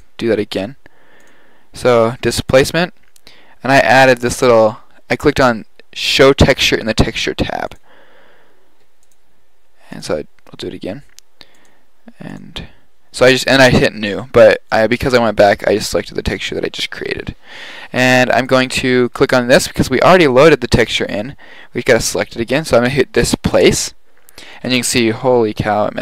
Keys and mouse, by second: 1.2-2.7 drag, 13.6-16.6 drag.